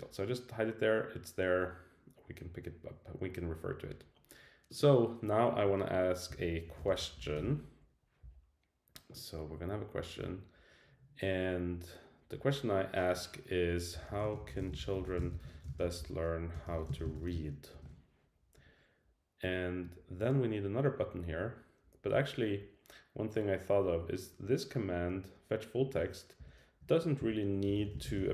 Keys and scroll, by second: 26.4 Return.